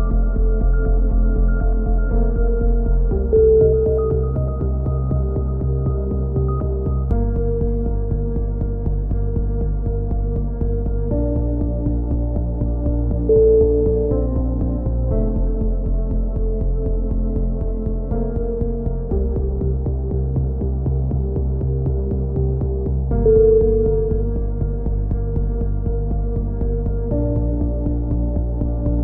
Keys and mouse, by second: 1.5 z, 1.9 click, 4.8-5.9 drag, 11.2 ctrl+z, 11.9 ctrl+z, 12.7 ctrl+z, 13.1 ctrl+z, 13.9-15.4 drag, 15.4 middle click, 16.0 click, 17.5 z, 18.2 Tab, 18.7 Tab, 19.0 click, 19.3 a, 19.7 click, 23.4-24.7 drag, 24.7 middle click, 25.3 KP_7, 27.1 middle click, 27.9 KP_3, 28.7 z.